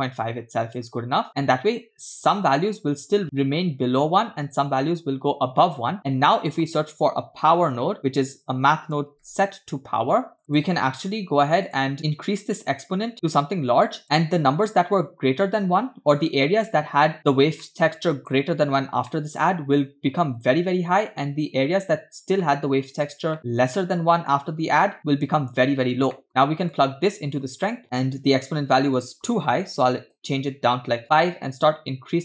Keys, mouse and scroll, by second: 0.2 click, 1.3 middle click, 6.0 shift+a, 8.4 BackSpace, 8.6 BackSpace, 10.5-11.8 drag, 12.0 click, 13.1 click, 17.2 click, 17.6 middle click, 18.2 click, 19.1 middle click, 22.4 middle click, 23.0 click, 23.4 middle click, 23.6 click, 26.1 middle click, 26.8-27.8 drag, 29.0 click, 31.0-32.2 drag.